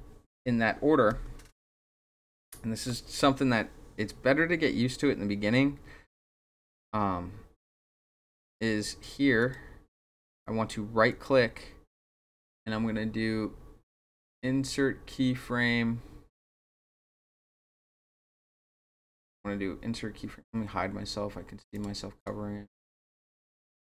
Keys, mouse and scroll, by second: 0.3 ctrl+z, 1.1 ctrl+z, 2.8-9.0 drag, 9.4 click, 11.1 right click, 21.7 click, 22.2 click, 22.9 click, 23.3 click.